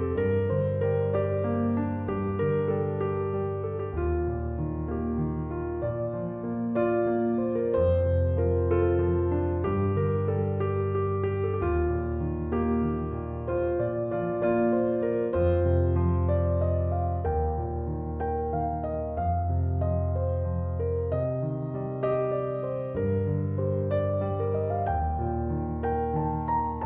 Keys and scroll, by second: 25.8 m.